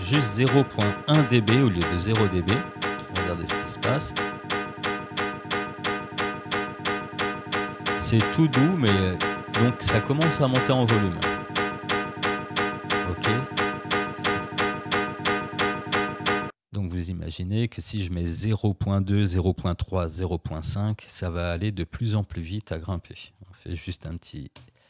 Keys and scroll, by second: 0.6 ., 1.2 1, 3.0 Return, 23.0-24.4 typing.